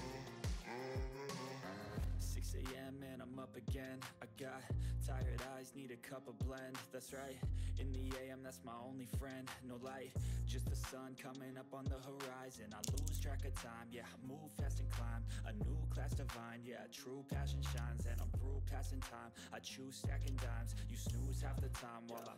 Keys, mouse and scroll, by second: 0.1 right click, 1.0 click, 8.2 click, 8.2 click, 10.9 click, 11.8-12.2 scroll up 1, 12.2 click, 12.4-13.5 typing, 15.1 click, 17.7 ctrl+scroll up 1, 18.3-20.0 shift+drag, 20.3 ctrl+scroll down 1, 20.5 ctrl+middle click, 21.0 ctrl+scroll up 1, 22.0 click.